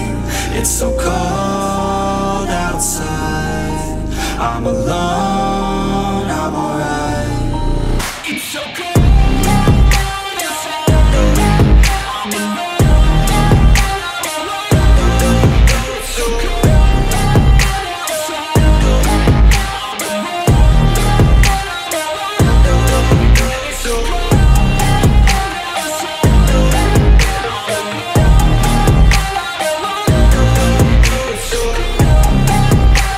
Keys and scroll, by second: 17.1 F4, 31.1 m.